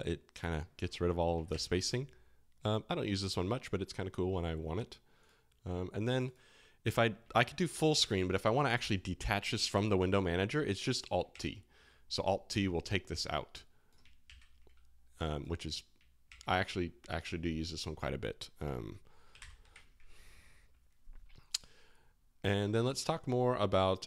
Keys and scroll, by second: 1.5 alt+g, 7.3 alt+f, 7.3 alt+g, 7.9 alt+f, 11.3 alt+t, 14.2 alt+g, 16.2 alt+t, 19.3 ctrl+alt+shift+l.